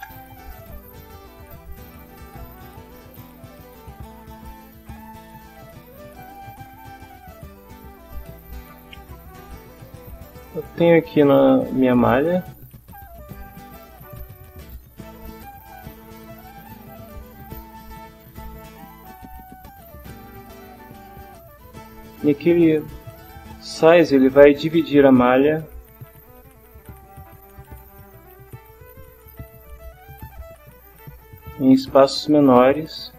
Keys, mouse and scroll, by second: 0.0 Return, 3.9 click, 5.1-7.6 drag, 7.7 click, 11.4 click, 12.9-16.5 drag, 16.6 middle click, 17.0 click, 17.9-19.9 drag, 21.0 click, 26.5-27.8 drag, 28.5-29.7 drag, 30.4 click, 32.6-33.1 drag.